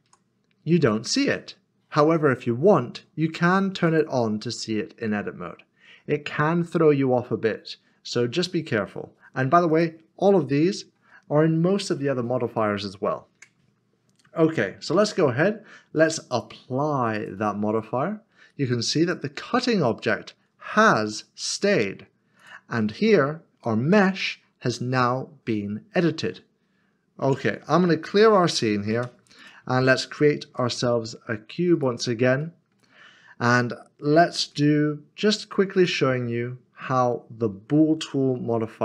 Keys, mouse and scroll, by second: 0.1 Tab, 0.6 scroll up 1, 3.8 click, 5.1 middle click, 9.7 click, 11.8 click, 11.9 scroll down 1, 13.3 Tab, 14.2 middle click, 16.3 click, 20.8 g, 21.5 click, 22.9 middle click, 24.2 middle click, 27.2 Tab, 27.6 scroll down 1, 28.1-28.9 typing, 29.5 click, 30.4 typing, 31.7 click, 32.4 middle click, 33.0 scroll up 1, 35.7 d, 35.8 click.